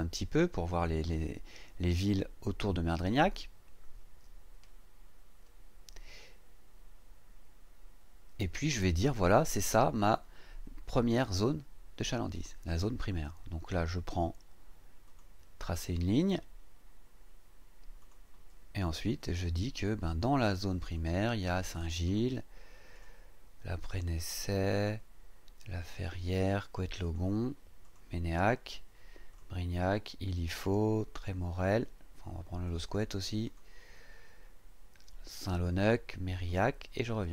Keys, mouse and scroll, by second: 0.1 ctrl+scroll down 2, 4.8-5.1 ctrl+scroll down 2, 15.0 click, 18.0 click, 20.0 click, 20.9 click, 22.0 click, 22.9 click, 23.8 click, 24.7 click, 25.9 click, 27.0 click, 27.8 click, 29.3 click, 30.4 click, 32.6 click, 33.4 click, 35.3 click, 36.4 click.